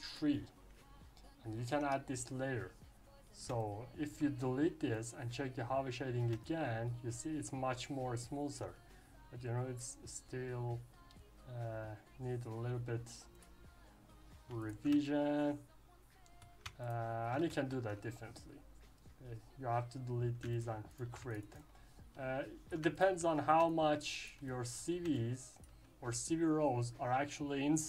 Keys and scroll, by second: 1.6 Delete, 1.7 Return, 17.4 ctrl+z.